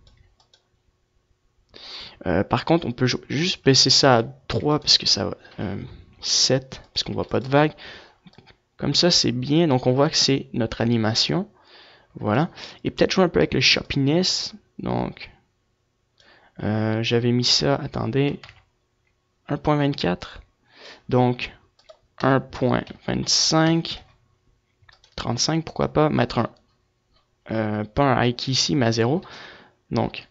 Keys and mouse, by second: 3.3-5.9 drag, 6.7-9.3 drag, 12.7-14.3 drag, 16.6 ctrl+z, 17.0 ctrl+z, 18.4-21.9 drag, 26.8-29.2 drag.